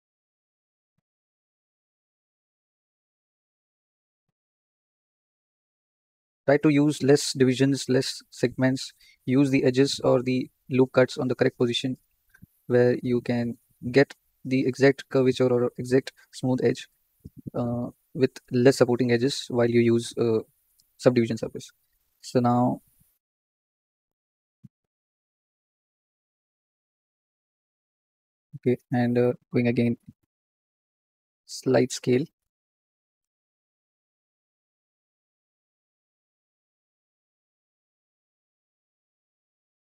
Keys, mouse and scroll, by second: 0.5 ctrl+r, 2.5 ctrl+r, 4.2 ctrl+r, 6.0 ctrl+r, 7.9 ctrl+r, 10.4 ctrl+r, 12.3 ctrl+r, 14.0 ctrl+r, 22.0 shift+click, 23.8 2, 24.9 click, 25.7 click, 26.6 shift+click, 27.3 shift+click, 29.1-30.8 drag, 30.8 s, 33.5 ctrl+click, 35.7 s, 37.5 ctrl+click, 38.7 s.